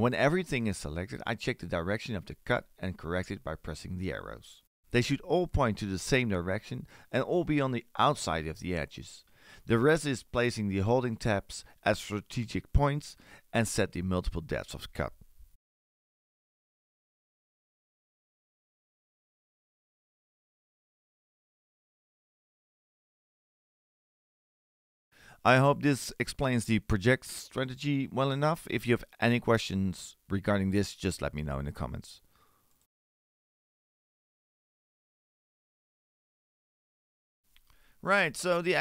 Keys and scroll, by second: 23.2 4.